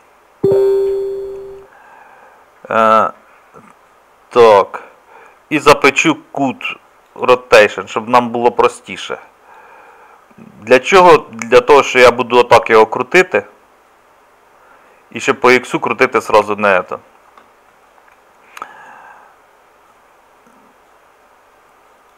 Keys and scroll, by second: 6.0 ctrl+a, 16.3 ctrl+z.